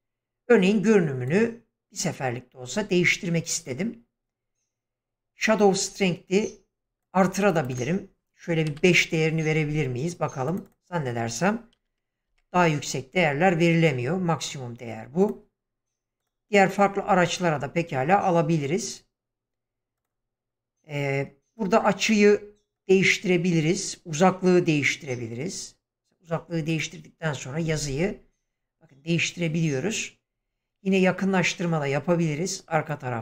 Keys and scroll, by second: 8.7 5, 8.9 Return, 11.7 2, 12.3 Return.